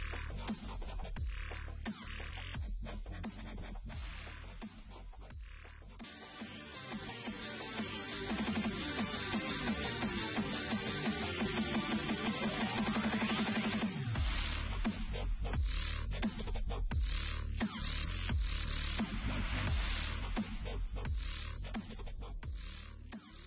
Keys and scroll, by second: 4.3 ctrl+z, 6.0 ctrl+z.